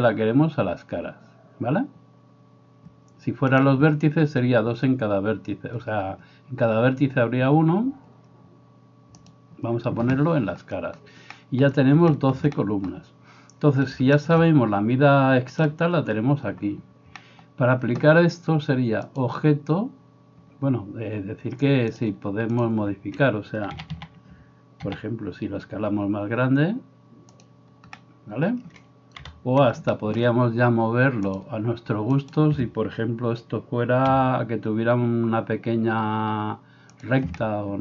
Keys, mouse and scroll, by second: 3.6 click, 3.7-9.3 middle drag, 9.3 click, 9.4-19.2 middle drag, 19.2-27.5 drag, 23.8 a, 23.9 a, 24.9 s, 27.5-31.3 middle drag, 29.3 KP_7, 31.3-37.1 drag, 32.3 middle click, 32.3 right click, 34.1 g, 37.1-37.8 middle drag.